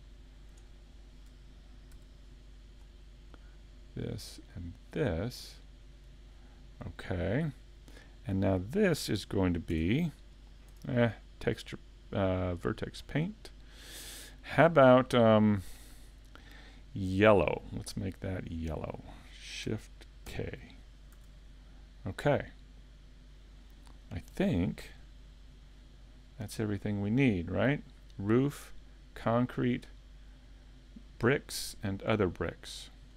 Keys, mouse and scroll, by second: 0.1 middle click, 0.7 shift+middle click, 1.9 c, 6.0 right click, 6.3 scroll down 4, 6.8 middle click, 9.7 Tab, 11.9 click, 18.6 click, 20.3 shift+k, 21.2 a, 21.7 middle click, 26.1 middle click, 32.4 middle click.